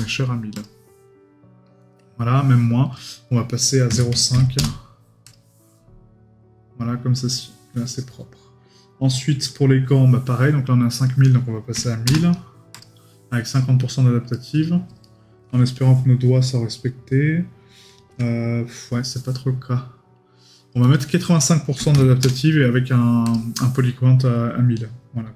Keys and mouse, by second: 14.3 right click.